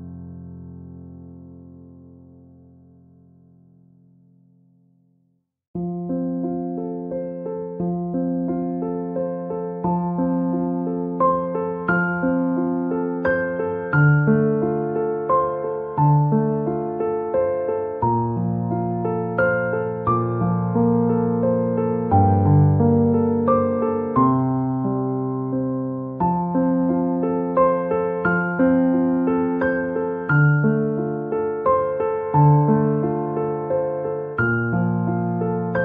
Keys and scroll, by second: 2.0 Return, 11.7 ctrl+shift+], 15.4 ctrl+=, 25.6 ctrl+shift+], 30.6 ctrl+shift+[, 31.8 Return, 32.4 ].